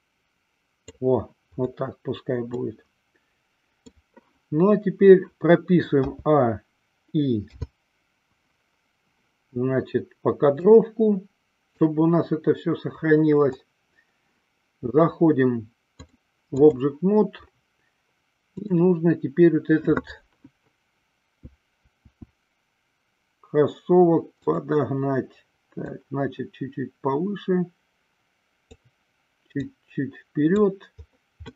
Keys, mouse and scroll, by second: 2.8-4.1 middle drag, 6.3 a, 7.8 i, 11.3 click, 16.2-17.0 drag, 18.7 click, 22.1 s, 24.5 click, 26.1-28.9 drag, 29.9 click.